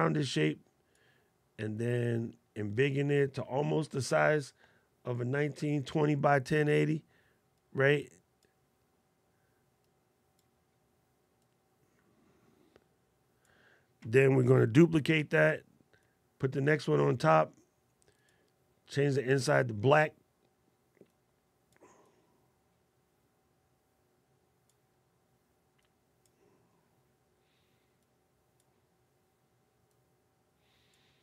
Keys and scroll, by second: 14.8 super+d.